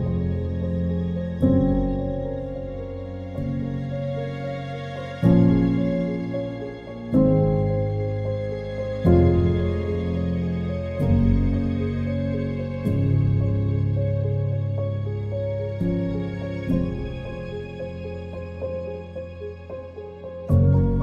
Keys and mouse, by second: 0.0 click, 1.7 click, 3.0 click, 3.9 click, 4.9 click, 6.0 click, 6.9 click, 8.0 click, 8.7 click, 9.6 click, 10.4 click, 11.5 click, 12.3 click, 15.4 click, 16.7 click, 18.0 click, 19.4 click, 20.2 Return.